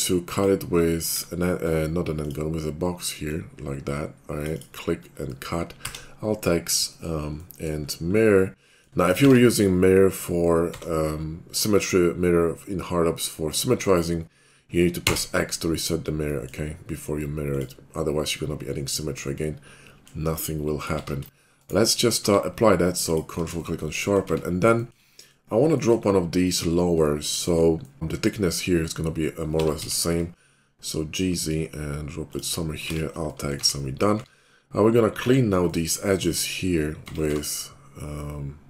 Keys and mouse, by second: 1.1 alt+w, 5.9 alt+x, 7.8-17.5 middle drag, 9.2 alt+x, 17.5 click, 18.2-20.8 middle drag, 20.8-26.5 drag, 22.2 q, 24.3 Tab, 26.5 middle click, 27.5-30.3 middle drag, 29.4 g, 32.4 middle click, 32.9 alt+x, 33.6 Tab, 34.1 q, 35.2 Tab, 37.1 Tab, 37.3 q.